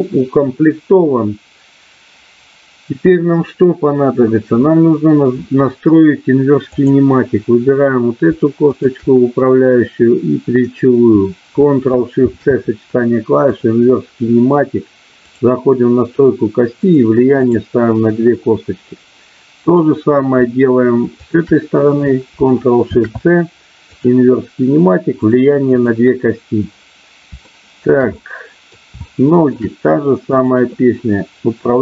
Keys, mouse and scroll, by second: 6.6-7.9 drag, 8.6-9.7 shift+drag, 12.1 ctrl+shift+c, 15.2 click, 16.7 click, 17.4 click, 21.1-22.2 shift+drag, 22.9 ctrl+shift+c, 25.2 click, 25.6 click, 27.5 shift+middle click, 28.1 middle click, 29.0 shift+middle click.